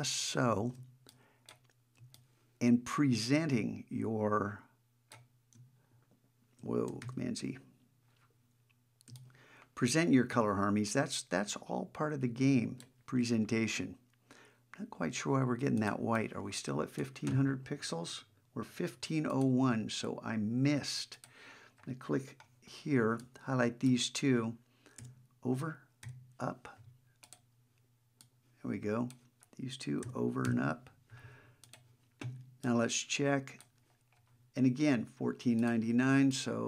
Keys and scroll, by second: 7.0 super+z.